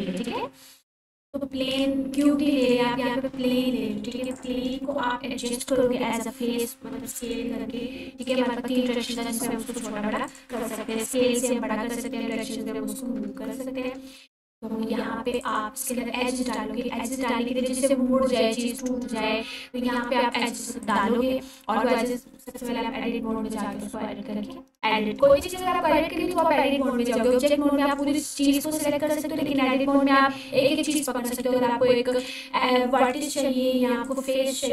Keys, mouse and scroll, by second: 0.0-0.8 typing, 1.1 click, 1.7-2.2 scroll up 1, 2.5-2.8 alt+click, 2.9-5.6 typing, 4.3 click, 5.4 click, 7.1 click, 7.7-8.2 scroll up 1, 8.2-9.2 alt+drag, 11.6-12.0 scroll up 1, 12.3-12.6 alt+shift+click, 12.6-13.2 scroll up 1, 13.9 ctrl+r, 15.4 click, 16.4 right click, 17.5 ctrl+r, 18.0-20.3 scroll up 1, 20.3 click, 21.7 Tab, 22.4-22.8 scroll down 1, 26.7-27.2 scroll down 1, 27.2-28.2 alt+drag.